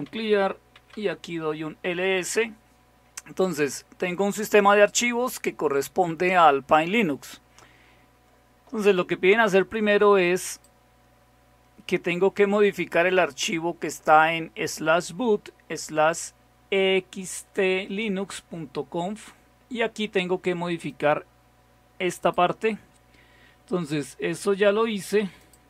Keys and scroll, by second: 0.0-1.8 typing.